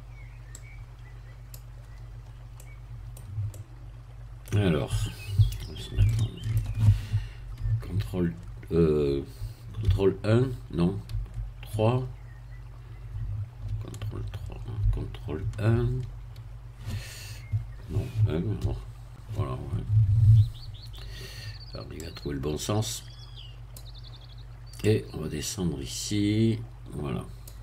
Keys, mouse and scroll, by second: 0.5-1.7 drag, 2.2-2.5 scroll up 2, 2.5-4.9 middle drag, 6.1 shift+middle click, 7.9 ctrl+3, 9.9 ctrl+1, 11.7 ctrl+3, 13.7 ctrl+3, 15.4 ctrl+KP_1, 18.6 1, 20.5-20.8 scroll up 2, 22.0-23.9 drag, 24.8-27.6 drag.